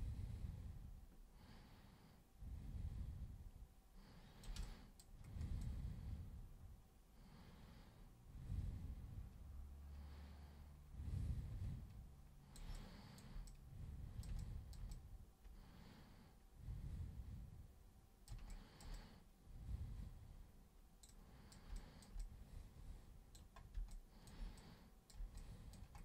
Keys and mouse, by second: 4.6 alt+super+click, 5.6-12.5 super+drag, 12.7 alt+super+click, 13.4 super+click, 14.3 alt+super+click, 14.9-18.2 super+drag, 18.5 alt+super+click, 18.9-21.0 super+drag, 21.1 super+click, 21.7 alt+super+click, 22.2-23.3 super+drag, 23.9 alt+super+click, 24.5 super+click, 25.3 alt+super+click.